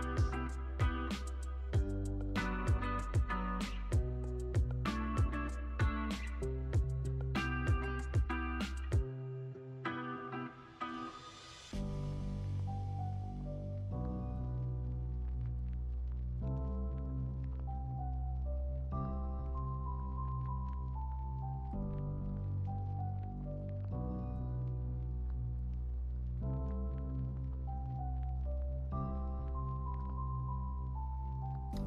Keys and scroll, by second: 16.5 super+=, 17.2 space, 18.5 super+s.